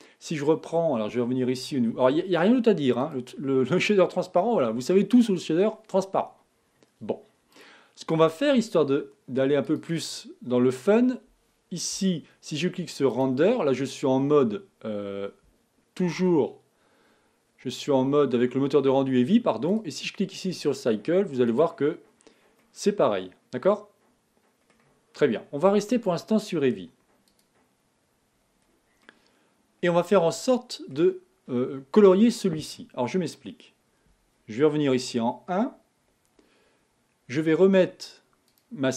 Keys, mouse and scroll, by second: 0.1-7.5 middle drag, 7.9-10.2 drag, 11.2-12.0 scroll down 2, 14.3 z, 16.6-21.8 middle drag, 21.8-23.7 drag, 26.4-28.6 drag, 28.6-31.1 middle drag, 31.2 scroll up 1, 35.5 KP_1, 38.8 click.